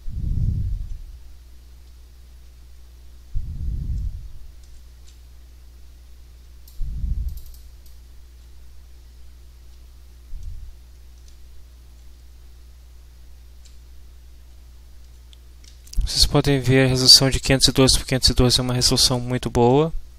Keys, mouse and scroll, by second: 1.8 w, 2.4 d, 7.2 click, 7.8-20.1 drag, 8.6 s, 9.7 a, 12.1 d, 14.5 d, 15.7 d, 19.4 s.